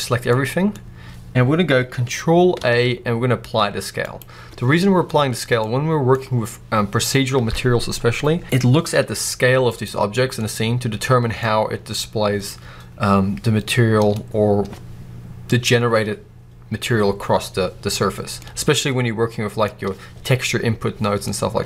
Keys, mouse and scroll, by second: 0.6-2.4 scroll up 2, 2.4 ctrl+a, 8.2 scroll down 2, 8.4 click, 8.9 g, 9.7 right click, 10.3-15.8 middle drag, 14.1-15.8 scroll up 2, 18.3-21.2 middle drag.